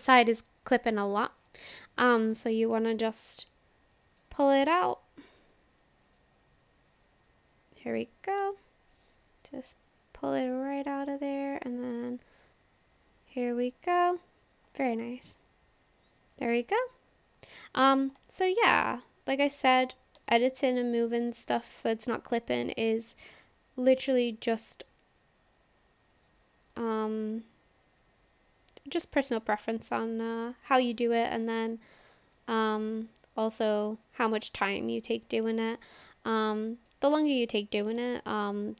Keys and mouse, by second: 0.1-4.2 drag, 4.7 click, 6.1 click, 7.0-10.4 drag, 12.3-14.2 drag, 14.8-17.9 middle drag, 18.3 shift+middle click, 18.7 middle click, 19.4 shift+middle click, 20.3 shift+middle click, 21.1 click, 22.0-26.3 drag, 26.8 ctrl+z, 28.0-29.4 drag, 30.7 click, 32.2 click, 32.8 click, 33.5-36.0 drag, 36.3 middle click, 37.4 middle click, 38.1 shift+middle click, 38.6 middle click.